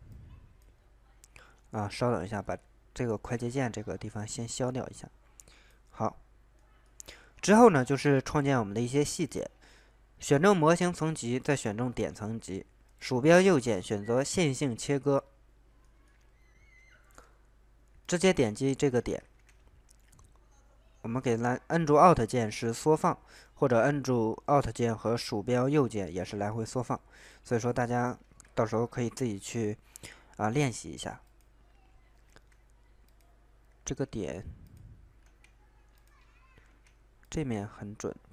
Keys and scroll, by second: 19.3 ctrl+z, 28.6 ctrl+z, 32.4 ctrl+z, 33.8 ctrl+z, 35.2 ctrl+z, 36.6 ctrl+z.